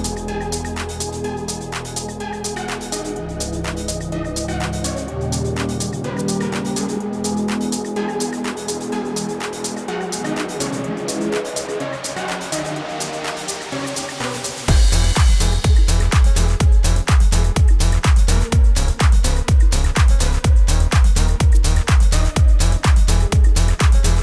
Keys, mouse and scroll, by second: 6.5 click, 7.8 space, 9.3 click, 11.5-12.0 scroll up 1, 12.4 alt+scroll up 1, 13.8 click, 16.7 scroll down 1, 18.0-18.7 alt+scroll down 2, 19.5 click, 22.7-23.0 alt+scroll down 1, 24.1-24.2 drag.